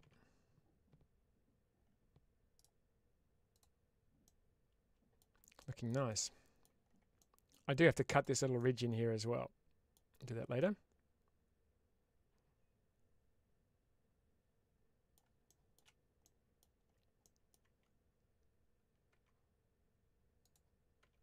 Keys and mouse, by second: 3.0 right click, 4.1-5.0 middle drag, 5.9-6.5 middle drag, 7.0 middle click, 8.4-9.8 middle drag, 10.4-15.0 middle drag, 16.1-16.4 middle drag, 17.1 middle click, 20.3 click.